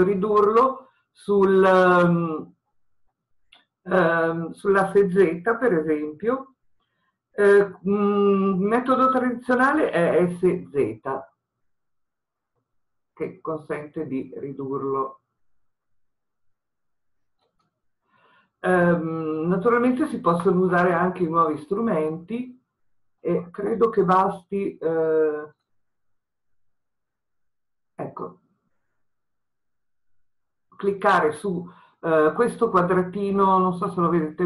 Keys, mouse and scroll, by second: 10.7 s, 18.1 click, 19.5-22.1 scroll up 1, 22.1-25.7 middle drag, 25.7-34.4 drag, 33.9-34.4 scroll up 1.